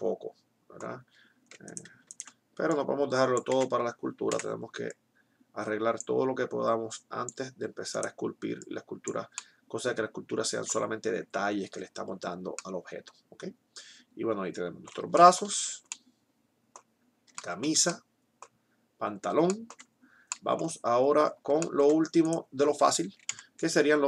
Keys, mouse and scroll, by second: 1.6-2.8 right drag, 2.8 middle click, 3.6 ctrl+z, 4.5 o, 9.3-10.3 drag, 9.3 right click, 11.6 Tab, 23.3 KP_1.